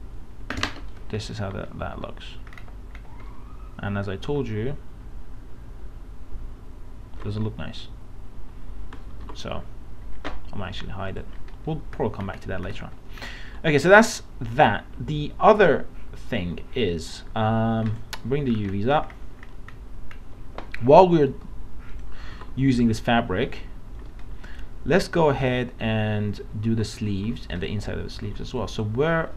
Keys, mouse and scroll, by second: 1.3 middle click, 1.4 scroll up 1, 2.6-3.2 scroll down 1, 8.5 ctrl+z, 9.3 alt+Tab, 11.1 click, 12.0 alt+scroll down 1, 17.9 click, 18.5 scroll down 1, 19.4 alt+scroll down 1, 22.0 click, 22.4 alt+Tab, 24.2 scroll down 1, 25.1 middle click, 25.4 scroll up 1, 26.7 alt+Tab, 27.3 alt+Tab, 27.5 click.